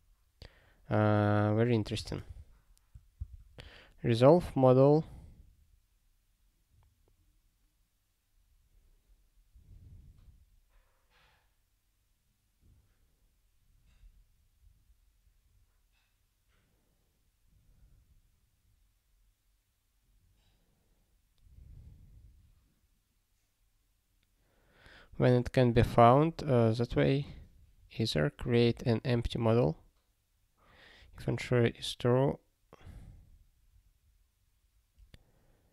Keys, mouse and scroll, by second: 2.3 ctrl+s.